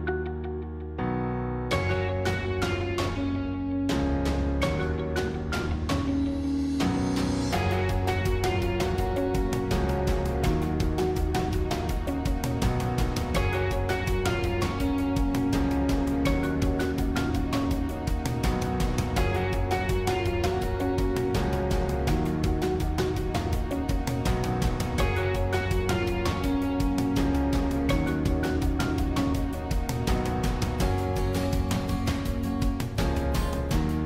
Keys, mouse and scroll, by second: 2.4 s, 4.8-5.9 middle drag, 5.9 scroll up 1, 6.2-7.9 middle drag, 7.9 e, 10.0-12.2 middle drag, 12.2 shift+click, 12.7-14.2 middle drag, 14.2 shift+click, 14.6-15.9 middle drag, 15.9 shift+click, 16.4 middle click, 17.3-19.5 drag, 19.8-21.6 middle drag, 21.6 shift+click, 22.1-24.2 middle drag, 24.2 shift+click, 24.7-26.4 middle drag, 26.4 e, 29.9-32.9 middle drag, 33.2-33.6 scroll down 2, 33.6-34.0 middle drag.